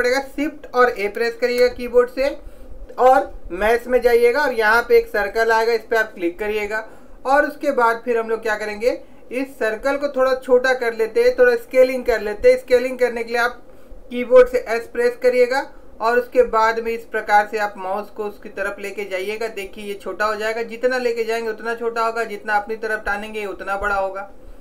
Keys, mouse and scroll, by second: 1.7 shift+a, 14.8 s.